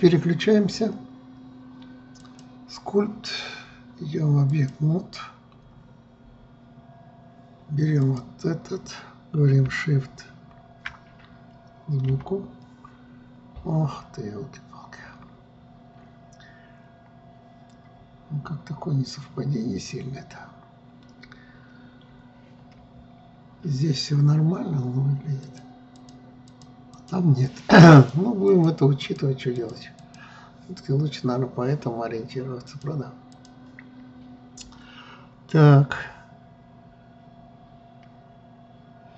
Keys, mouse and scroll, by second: 2.7-5.8 drag, 8.5 click, 12.6 KP_3, 23.4 KP_1, 26.0 click, 26.5 click, 27.0 click, 27.5 click, 28.0 click, 28.5 click, 29.0 click, 29.6 click, 30.1 click, 30.5 click, 33.2 click, 33.9 click.